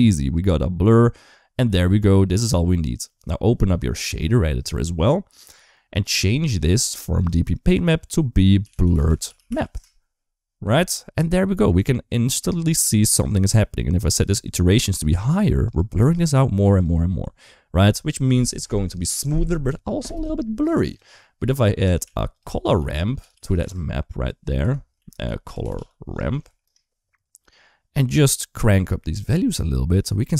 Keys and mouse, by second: 2.1-4.0 drag, 4.5-5.2 drag, 5.8 middle click, 6.9-9.5 drag, 8.8 r, 12.3 shift+middle click, 14.8 click, 15.1 click, 15.4 click, 20.4 click, 20.6 click, 21.1 middle click, 21.8 shift+a, 24.9 shift+a, 28.7 middle click, 29.3-30.3 drag.